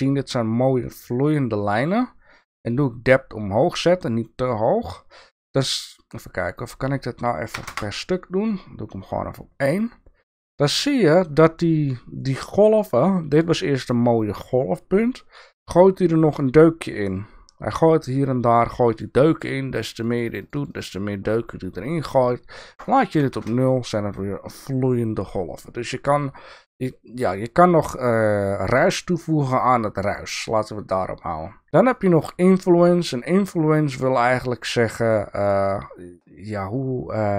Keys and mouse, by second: 22.9-24.1 drag, 31.9 click, 33.4-35.4 drag.